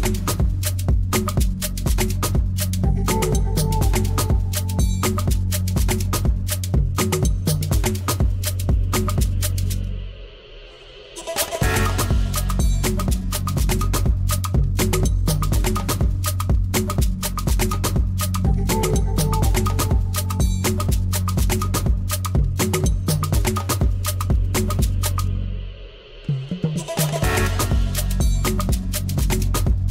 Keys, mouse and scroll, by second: 0.9-2.6 drag, 3.1 click, 3.5 click, 5.0 h, 6.2-7.9 typing, 9.7 click, 10.7-12.5 drag, 12.8 click, 13.9-16.7 typing, 19.5-21.4 drag, 21.7 click, 22.9-25.5 typing, 26.6 l, 28.0-29.8 drag.